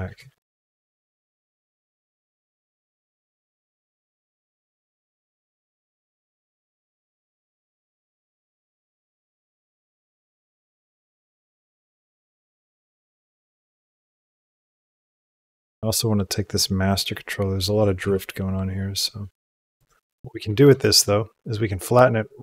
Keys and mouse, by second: 0.0 g, 2.2-4.8 drag, 5.0-8.4 drag, 8.5 space, 10.0 space, 10.7 click, 10.9 g, 12.0 click, 12.2 space, 13.6 click, 14.7 click, 15.8 space, 17.5 click, 17.9 g, 20.6 shift+click.